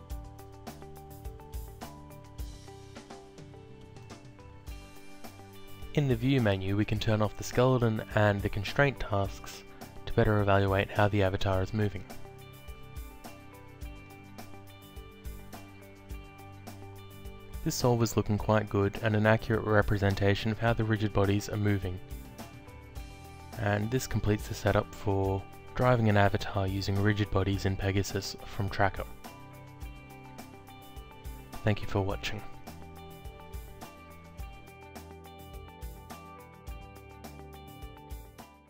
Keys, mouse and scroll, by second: 0.3 alt+click, 1.5 alt+click, 6.2 click, 7.3 click, 8.0 alt+click, 9.3 click, 14.0 click, 17.5 alt+click, 21.0 alt+Tab, 24.9 click, 28.7 click.